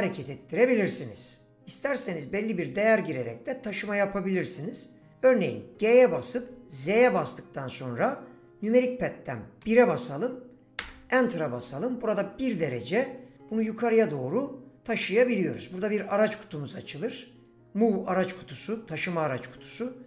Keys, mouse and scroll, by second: 6.3 g, 6.8 z, 9.6 KP_1, 10.8 KP_Enter, 17.4 click.